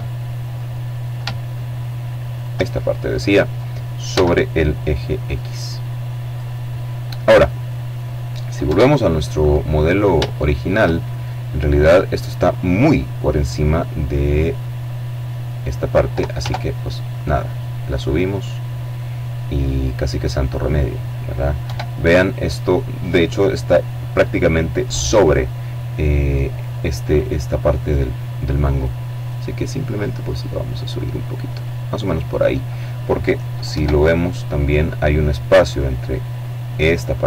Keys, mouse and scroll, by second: 0.5 shift+right click, 1.4 middle click, 2.9 e, 5.1 click, 7.4 KP_7, 8.5-9.1 scroll down 2, 10.0-10.6 shift+scroll up 1, 13.1-14.7 drag, 15.1 Tab, 15.8-19.7 drag, 20.3 KP_7, 24.3-25.5 middle drag, 25.9 middle click, 26.6-27.1 scroll up 1, 27.5-31.6 drag, 32.4 KP_7, 36.9-37.2 middle drag.